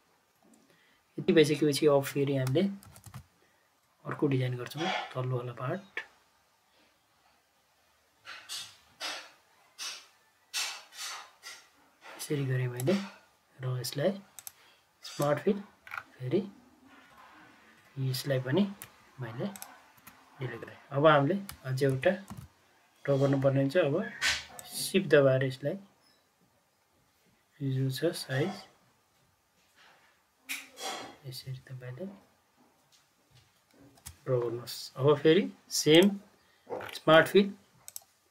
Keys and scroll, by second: 2.8 ctrl+c, 3.0 ctrl+v, 18.8 Delete, 19.9 Delete, 21.9 ctrl+c, 22.2 ctrl+v, 33.9 ctrl+v.